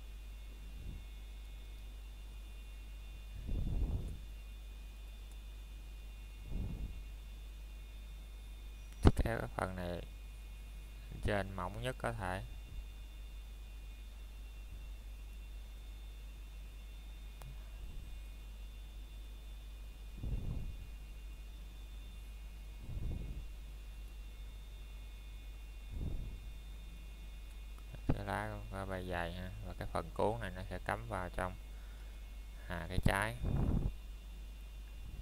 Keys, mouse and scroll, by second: 0.9 click, 7.0-7.4 scroll down 1, 7.4 middle click, 8.1-9.1 scroll down 1, 9.4 click, 10.2 middle click, 11.4-12.1 scroll up 1, 12.6 middle click, 12.9 scroll up 1, 13.8 Tab, 15.7 click, 16.3 middle click, 18.2-18.7 scroll up 1, 18.7 middle click, 19.7 scroll down 1, 20.0 middle click, 21.3-21.9 scroll up 1, 22.4 middle click, 27.5-28.4 scroll up 1, 28.8 middle click, 31.3-32.3 scroll up 1, 32.3 click, 32.9 middle click, 33.2 scroll up 1, 33.5 shift+middle click, 33.9 scroll up 1, 34.3 middle click, 34.9 scroll up 1.